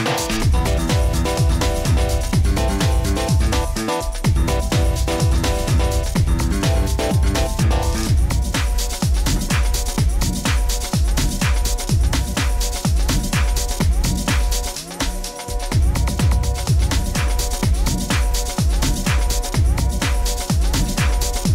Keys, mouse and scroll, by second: 1.7 click, 2.0 middle click, 2.8 middle click, 2.8 e, 6.5 scroll, 6.6 click, 7.5 e, 9.5 click, 9.8-10.6 scroll, 10.6 e, 13.7 click, 14.1 e, 15.9 click, 17.2 scroll, 17.2 middle click, 17.3 middle click, 17.6 middle click, 19.7 click, 20.4 click.